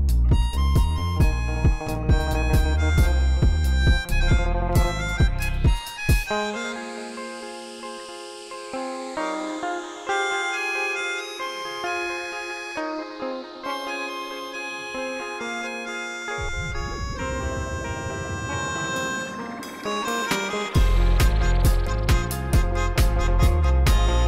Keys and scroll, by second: 0.3 r, 0.5 z, 3.2 r, 3.4 z, 8.1 r, 8.3 z, 20.9 shift+s, 22.5 g, 22.6 z, 23.7 Tab, 24.1 s, 24.2 2.